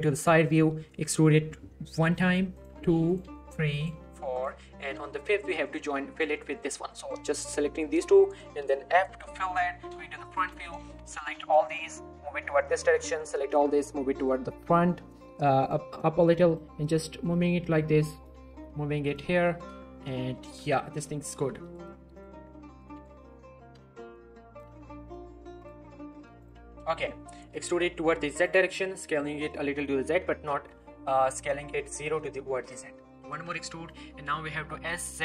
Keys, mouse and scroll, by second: 0.2 shift+middle click, 0.4-0.7 shift+scroll up 2, 2.5 click, 2.7 e, 3.1 click, 3.7 click, 3.9 e, 4.3 click, 4.5 scroll down 1, 4.7 middle click, 4.8 z, 5.0 middle click, 5.6 shift+click, 6.9 shift+middle click, 9.1 f, 10.5 z, 10.7-11.1 scroll up 1, 11.1 click, 11.4 shift+middle click, 11.6 g, 12.6 click, 13.2 g, 13.5 z, 14.2 click, 14.5-14.9 scroll up 1, 14.9 click, 15.2 g, 15.6 click, 15.9 r, 16.5 click, 16.7 g, 17.2 click, 17.5 scroll down 2, 17.6 shift+middle click, 18.1 click, 18.3 g, 19.1 click, 19.5 z, 20.5 alt+shift+click, 20.8 scroll down 1, 21.1 shift+middle click, 21.2-21.8 shift+scroll up 2, 21.6 shift+middle click, 21.8-22.4 middle drag, 23.6 z, 24.1-24.7 click, 24.7 g, 25.6 click, 26.4 alt+shift+click, 26.6-26.9 shift+scroll down 3, 26.9 shift+middle click, 27.5 e, 27.6 z, 28.4 click, 28.8 s, 29.0 z, 29.9 click, 30.1 z, 31.8 g, 32.1 right click, 33.1 e, 33.3 z, 33.9 click, 34.6 s, 35.1 z.